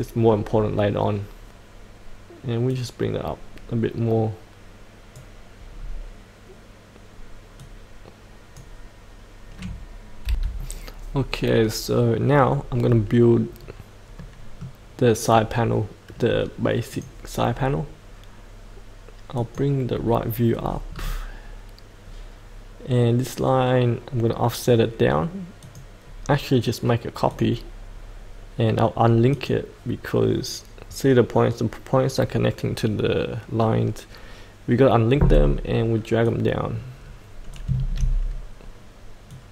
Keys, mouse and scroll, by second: 2.6-5.3 drag, 5.8-7.6 scroll down 1, 7.6 click, 10.2 F8, 11.1-12.4 scroll down 1, 12.4-15.4 middle drag, 16.9 click, 17.5-19.3 scroll down 1, 19.3 click, 20.5-21.0 scroll down 1, 25.6 click, 39.3 click.